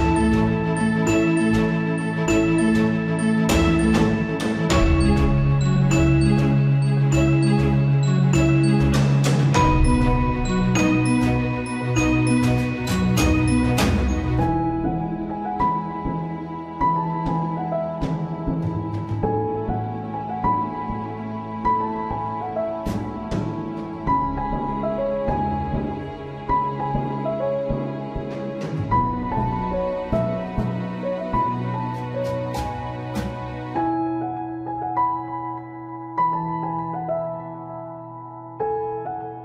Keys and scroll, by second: 3.5 ctrl+a, 14.0 Up, 14.2 Down, 14.3 Up, 17.2 BackSpace, 18.0 Return, 20.1 alt+/, 20.8 ctrl+t, 21.6 ctrl+a, 22.5 Down, 23.0 ctrl+space, 23.2 Return, 26.9 alt+/, 36.4 Caps_Lock.